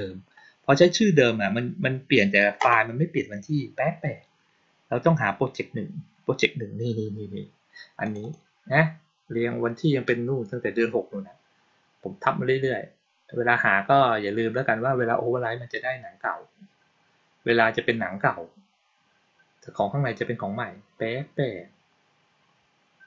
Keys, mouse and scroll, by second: 7.9 click, 8.1 click.